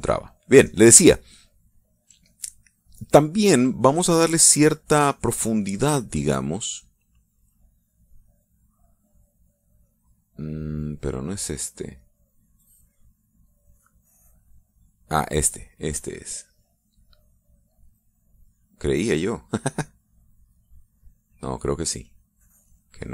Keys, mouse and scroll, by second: 0.7 middle click, 1.5 middle click, 7.9-9.0 drag, 10.3 click, 10.7 click, 12.1 click, 13.8 click, 14.4 click, 15.1 click, 15.6 click, 17.9 click, 18.4 click, 19.1 click, 19.7 click, 20.9 click, 22.9 click.